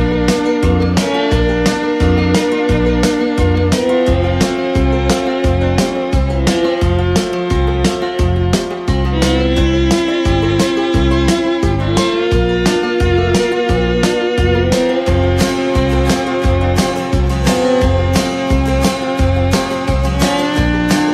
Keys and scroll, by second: 0.7 ctrl+c, 3.8 ctrl+c, 4.0 ctrl+v, 8.0 ctrl+c, 8.2 ctrl+v, 12.6 ctrl+c, 12.8 ctrl+v, 20.2 ctrl+c, 20.4 ctrl+v.